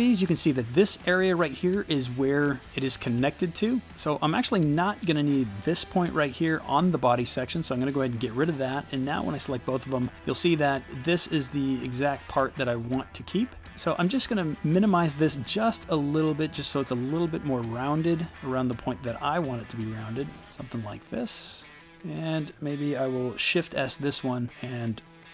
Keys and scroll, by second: 6.7 Delete, 23.8 shift+s.